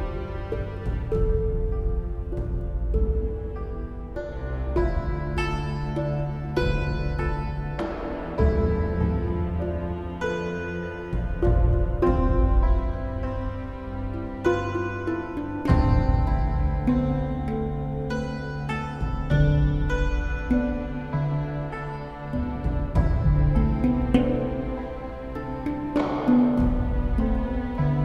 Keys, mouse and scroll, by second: 0.6 right click, 0.8 right click, 1.3 right click, 2.1 right click, 3.3 right click, 4.3 right click, 5.1 right click, 5.4 right click, 5.7 right click, 6.5 right click, 6.8 right click, 7.0 right click, 7.4 right click, 8.0 right click, 8.2 right click, 8.8 right click, 11.4 right click, 11.8 right click, 11.9 right click, 12.1 right click, 13.0 right click, 13.7 right click, 15.2 right click, 15.9 right click, 16.3 right click, 16.7 right click, 18.2 right click, 19.5 right click, 20.2 right click, 20.5 right click, 20.7 right click, 20.9 right click, 21.5 right click, 21.9 right click, 22.1 right click, 22.5 right click, 23.0 right click, 23.2 right click, 23.5 right click, 24.3 right click, 24.7 right click, 24.9 right click, 25.3 right click, 25.9 right click, 26.2 right click, 27.9 right click.